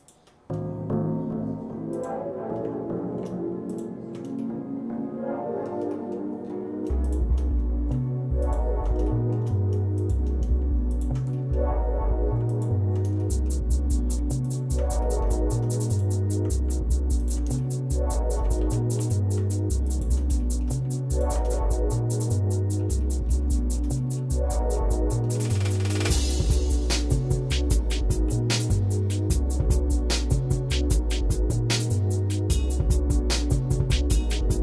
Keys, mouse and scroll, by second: 0.0 shift+click, 1.9 ctrl+shift+click, 3.7 ctrl+click, 4.4-5.8 shift+middle drag, 5.9 middle click, 6.4-6.8 scroll up 1, 7.0 shift+click, 8.4 ctrl+shift+click, 9.1 shift+middle click, 10.0 shift+click, 10.9 ctrl+shift+click, 11.3 middle click, 12.5 ctrl+click, 13.2 shift+middle click, 14.4 ctrl+click, 15.0 middle click, 15.9 ctrl+click, 17.4 ctrl+click, 17.6 shift+middle click, 18.6 ctrl+z, 19.0 ctrl+z, 19.9 shift+click, 20.4 shift+middle click, 21.1 ctrl+shift+click, 21.6-22.9 shift+middle drag, 23.0 middle click, 23.5 shift+middle click, 24.0 middle click, 24.5 middle click, 25.1 middle click, 25.7 scroll up 1, 28.3 i.